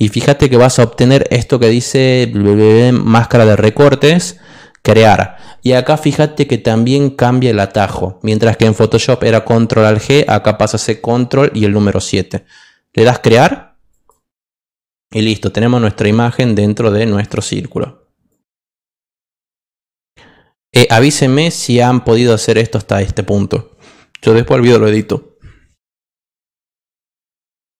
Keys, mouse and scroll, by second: 13.9 click, 17.2 click, 19.7 click.